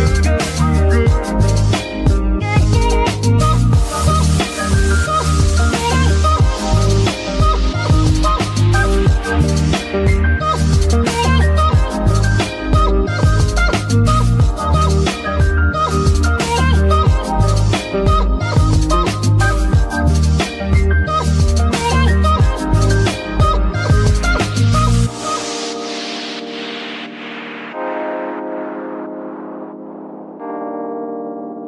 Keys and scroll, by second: 0.3 shift+Escape, 7.0 Escape, 8.1 ctrl+Tab, 11.2 F2, 11.6 c, 11.8 c, 11.9 c, 12.4 Tab, 13.9 Tab, 14.8 KP_Divide, 15.7 z, 16.5 Tab, 18.0 Tab, 19.1 Tab, 19.9 alt+a, 23.7 z, 25.5 alt+a, 28.4 Tab, 29.4 KP_Divide.